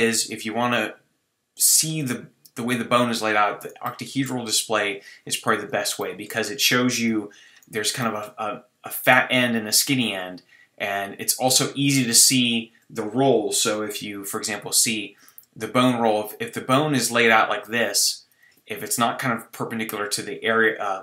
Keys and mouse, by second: 3.3-4.5 drag, 4.5-6.0 middle drag, 7.1 KP_1, 11.4-14.1 drag, 14.1 ctrl+r, 18.4-21.0 drag.